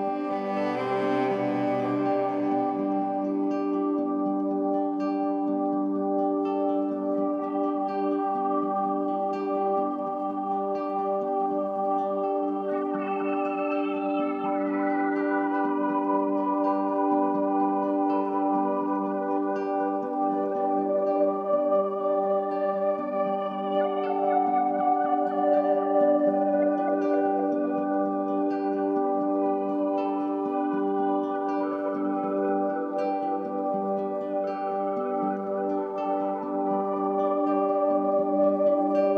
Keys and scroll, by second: 1.0 m, 11.3 ctrl+t, 29.4 Return, 37.9 ctrl+c.